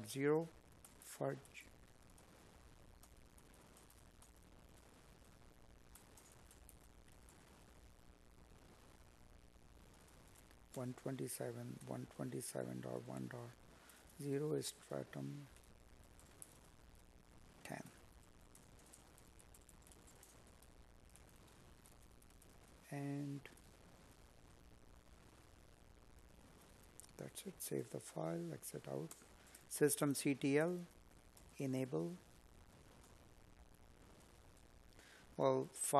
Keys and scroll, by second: 3.3 space, 5.8 space, 7.3 Escape, 11.2 space, 13.6 Up, 15.4 space, 19.9 space, 26.6 space, 28.6 space, 35.6 space.